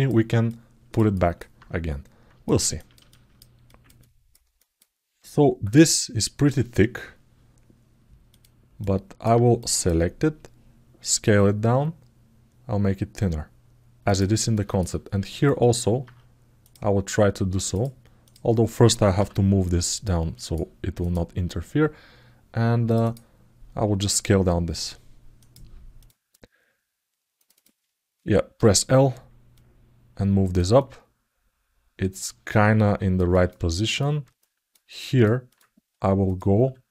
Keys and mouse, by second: 0.2 alt+middle click, 0.9 ctrl+alt+middle click, 2.2 ctrl+alt+middle click, 2.8 alt+shift+middle click, 3.4 ctrl+alt+middle click, 4.3 alt+shift+middle click, 8.1 click, 8.6 alt+middle click, 9.4 click, 9.5 click, 14.3 alt+shift+middle click, 15.2 alt+shift+middle click, 16.4 click, 17.3 click, 17.5 click, 18.0 click, 19.8 click, 20.7 click, 22.6 click, 22.8 click, 25.7 click, 27.3 click, 29.3-30.3 drag, 30.5-32.9 alt+middle drag, 33.1 ctrl+alt+middle click, 33.4 alt+shift+middle click, 34.1 ctrl+alt+middle click, 34.6 ctrl+alt+middle click, 35.3 middle click, 36.0 click.